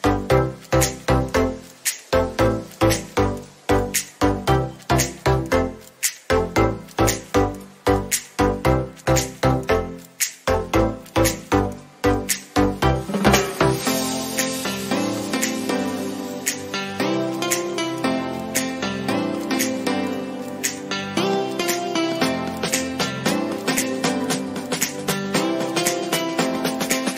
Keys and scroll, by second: 4.6 ctrl+alt+z, 7.2 ctrl+j.